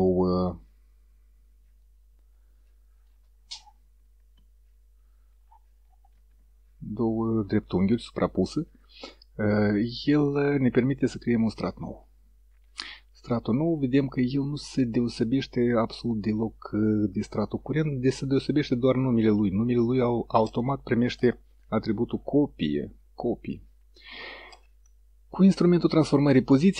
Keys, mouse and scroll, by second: 1.9 click, 6.2 ctrl+z, 13.0 click.